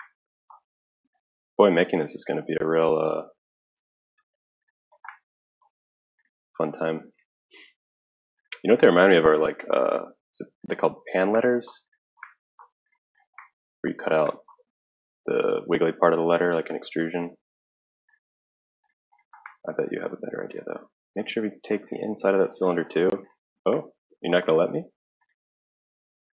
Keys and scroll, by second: 7.0 Escape, 7.0 Escape.